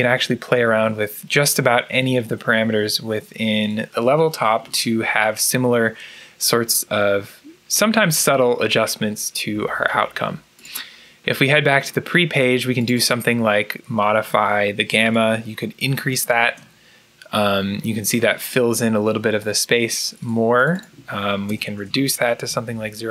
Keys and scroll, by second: 15.9 2, 16.3 Return, 21.1-23.0 typing.